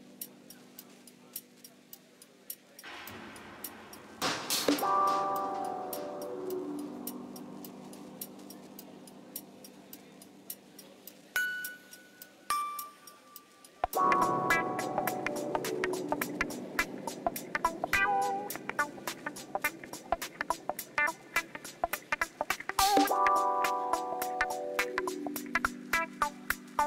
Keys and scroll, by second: 5.3 Tab, 12.3 ctrl++, 16.9 ctrl+z, 20.6 ctrl+z.